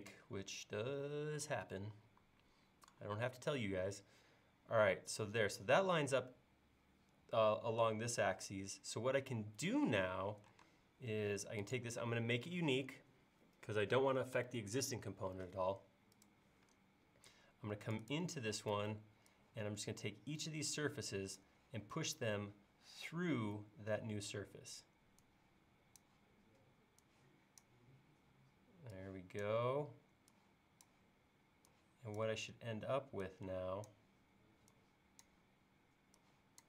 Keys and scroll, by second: 10.7 space, 18.6 p.